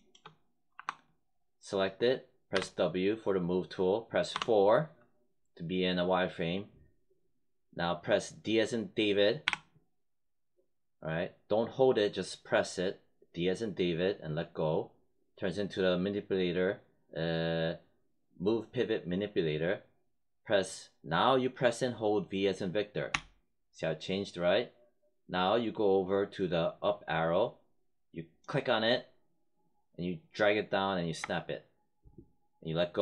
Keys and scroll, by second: 0.7 5, 2.4 w, 4.2 4, 9.3 d, 23.0 v.